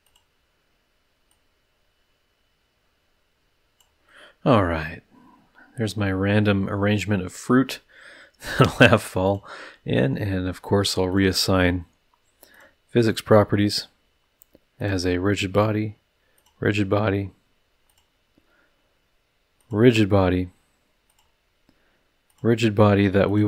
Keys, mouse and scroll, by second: 0.0 click, 1.3-4.0 drag, 4.1-5.9 middle drag, 5.9-7.1 drag, 7.1-9.0 middle drag, 9.2 click, 9.6-10.0 scroll up 1, 10.2 middle drag, 11.1 click, 12.5 click, 14.8 click, 15.5 click, 16.3 click, 17.9 click, 19.6 click, 21.1 click, 22.2 click, 23.2 click.